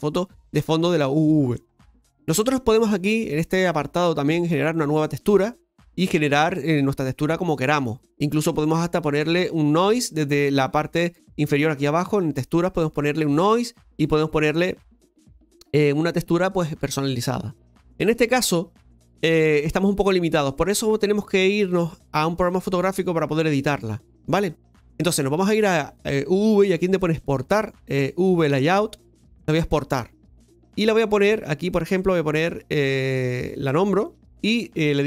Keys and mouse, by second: 5.1-29.2 drag.